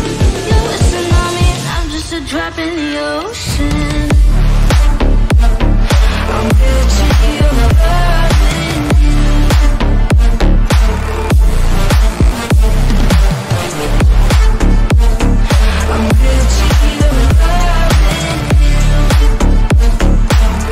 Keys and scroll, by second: 1.6 Delete, 2.0 F3, 7.4 ctrl+g, 19.0 F4.